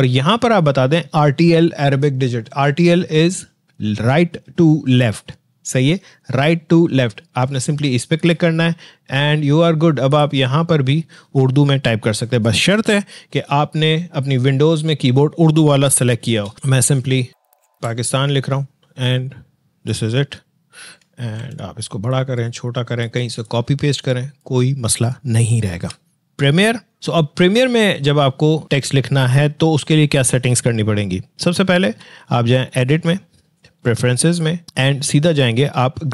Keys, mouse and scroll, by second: 10.3 click, 16.3-18.4 typing, 19.7 click, 21.4 ctrl+t, 22.0-23.0 drag.